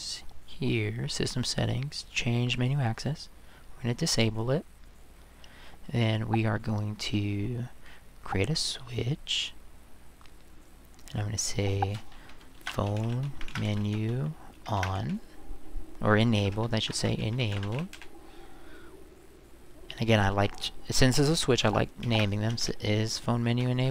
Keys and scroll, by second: 12.3-15.3 typing, 16.4-18.4 typing, 22.0-23.0 typing, 23.5 End.